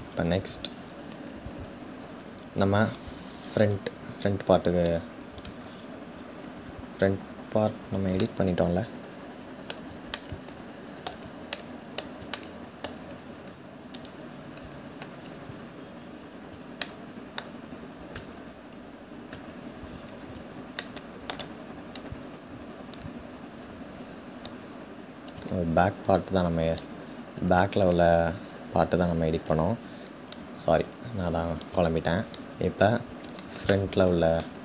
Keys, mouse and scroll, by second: 0.3-2.6 scroll down 3, 2.6-3.8 scroll up 3, 3.8-4.6 scroll up 1, 4.6 click, 5.2-7.0 scroll down 7, 5.7-7.1 middle drag, 7.0-7.7 scroll up 5, 7.3-12.6 middle drag, 12.6-13.7 scroll down 2, 13.7 click, 14.7-15.8 scroll up 5, 15.8 scroll down 1, 16.5-18.1 shift+middle drag, 18.1 Tab, 19.1 Tab, 19.3-20.4 scroll down 2, 20.4-21.6 shift+middle drag, 21.6 click, 24.1 click, 26.4-28.0 drag, 28.0-28.7 scroll up 3, 28.7 scroll down 1, 30.2 click, 32.0-34.6 shift+drag.